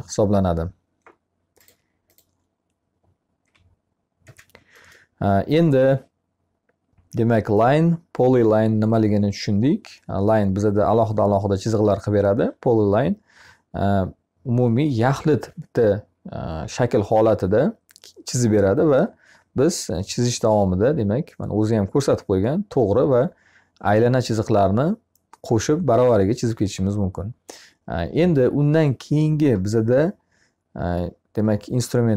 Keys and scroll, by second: 2.8 e.